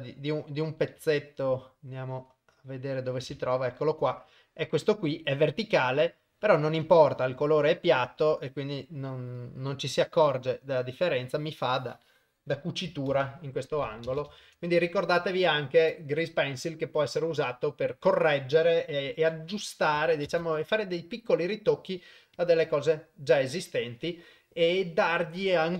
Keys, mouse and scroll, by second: 0.7 middle drag, 1.2-3.3 shift+middle drag, 3.5-3.9 ctrl+middle drag, 4.5-4.8 middle drag, 5.5-6.4 middle drag, 7.4 KP_0, 10.1-12.8 drag, 13.2 shift+space, 14.2 shift+space, 14.6 ctrl+s, 19.2 shift+Left, 20.3 shift+space, 22.6-23.0 drag.